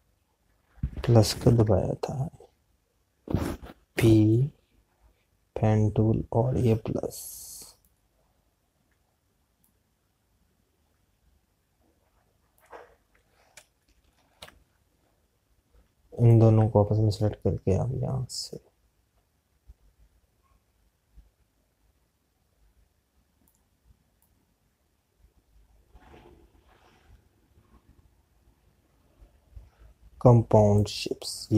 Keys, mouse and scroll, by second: 6.7 p, 8.6 click, 14.6 Left, 26.2 click.